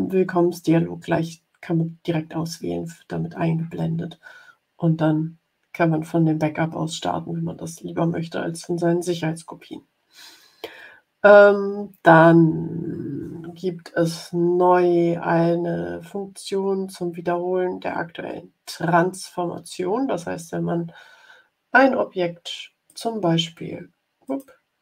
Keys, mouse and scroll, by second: 19.5 scroll down 2, 20.4-21.5 scroll down 6, 22.8 click, 24.2 click.